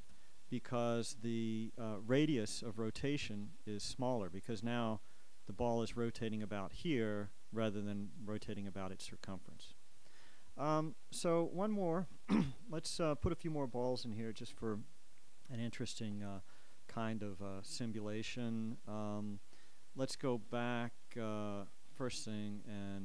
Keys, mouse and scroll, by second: 0.2 alt+a, 4.7 Escape, 6.2 right click, 8.6 right click, 12.3-13.6 drag, 22.1 click.